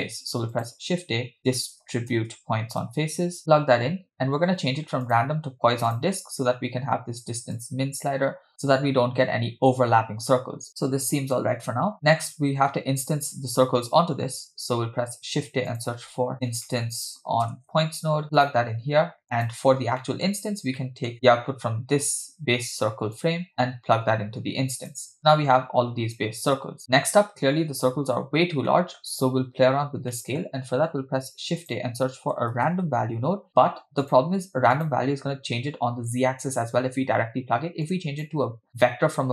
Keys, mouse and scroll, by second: 0.0 shift+a, 3.0 BackSpace, 4.5-5.0 scroll up 2, 5.1-6.1 drag, 7.6-10.7 shift+drag, 11.9 middle click, 13.6-14.5 scroll down 2, 14.6 shift+a, 19.2 click, 19.7-20.1 scroll down 2, 20.1 middle click, 20.8 middle click, 23.2 click, 23.3-24.9 drag, 26.3 click, 28.7 middle click, 29.2-30.2 scroll up 1, 30.2 scroll up 2, 30.2 middle click, 30.7 shift+a, 37.9 click, 38.7-39.3 drag.